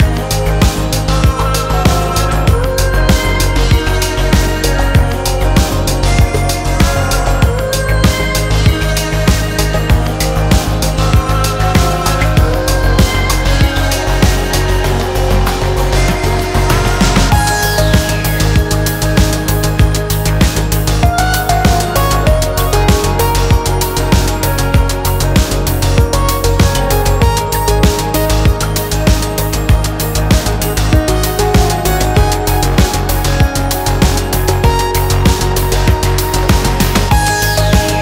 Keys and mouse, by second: 1.6 Tab, 2.1 shift+drag, 2.4-2.8 drag, 3.1-5.5 drag, 6.0 click, 6.6 Tab, 7.8 2, 8.7 ctrl+b, 12.6 Tab, 13.4 drag, 13.8 shift+drag, 14.1-15.7 drag, 16.0 ctrl+z, 16.1 ctrl+z, 16.3 ctrl+z, 16.7 ctrl+z, 18.8 click, 19.2 Tab, 20.0 ctrl+a, 21.0 shift+click, 21.3 click, 21.6 Tab, 22.8-24.0 drag, 24.9 shift+click, 25.5 middle click, 26.8 ctrl+b, 30.8 s, 34.6 s, 37.3 Tab, 37.6-38.0 drag.